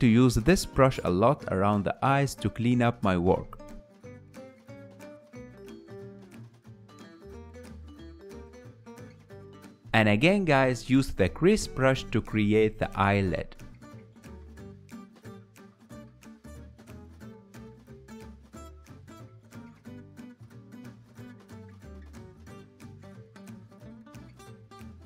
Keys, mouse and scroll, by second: 0.6-7.0 ctrl+middle drag, 7.0 KP_1, 7.8-9.5 ctrl+middle drag, 9.5 click, 9.9 ctrl+middle click, 10.5 f, 11.6-13.6 drag, 13.6 f, 14.5-17.1 drag, 17.1 ctrl+middle click, 17.4 ctrl+z, 17.7 ctrl+z, 18.0 ctrl+z, 18.6 ctrl+z, 19.0 ctrl+z, 20.2-23.2 drag, 23.2 ctrl+middle click, 24.0 click, 24.3-25.0 ctrl+middle drag.